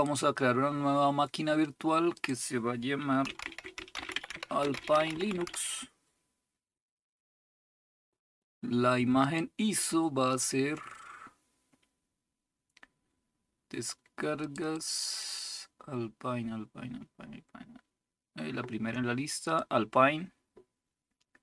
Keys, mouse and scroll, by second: 0.7 click, 2.1-3.1 drag, 3.1-5.9 typing, 9.2 click, 10.2 click, 14.4 click, 19.4 click.